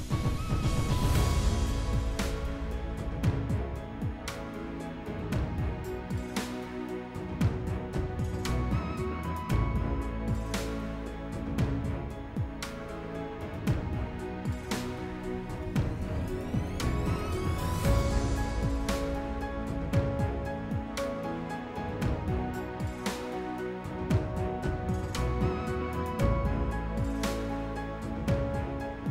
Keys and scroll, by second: 0.0-0.6 typing, 2.1-3.5 typing.